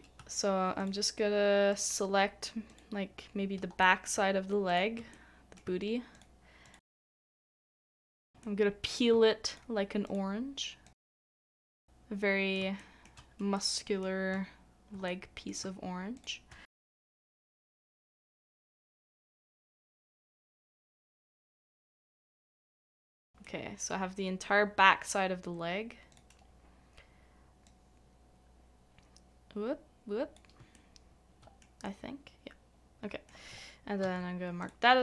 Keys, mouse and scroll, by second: 0.8 shift+click, 1.7 shift+click, 2.7 shift+click, 3.8 middle click, 4.7 shift+click, 5.1 middle click, 6.1 shift+click, 6.8 middle click, 7.3 shift+click, 7.7 shift+click, 8.0 middle click, 8.4 middle click, 9.5 shift+click, 10.8 shift+click, 11.1 shift+middle click, 11.3 shift+click, 11.8 shift+middle click, 12.8 shift+middle click, 15.1 middle click, 16.1 shift+click, 16.6 middle click, 17.2 shift+click, 17.6 shift+middle click, 17.8 shift+right click, 18.2 c, 18.3 shift+middle click, 18.6 shift+middle click, 18.9 middle click, 18.9 shift+right click, 19.2 shift+middle click, 19.8 c, 19.8 scroll up 1, 20.4 c, 20.4 shift+middle click, 20.9 shift+click, 21.2 shift+click, 21.5 shift+middle click, 22.2 shift+click, 22.4 shift+middle click, 22.7 shift+click, 22.9 shift+middle click, 23.1 shift+middle click, 30.6 middle click, 30.7 shift+middle click, 34.0 ctrl+e.